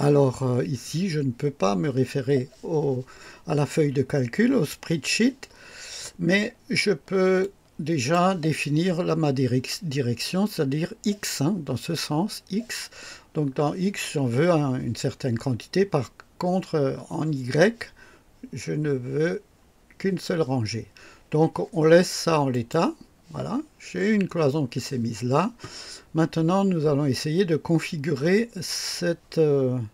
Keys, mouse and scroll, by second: 7.4 click, 19.0 scroll down 2, 22.5 click.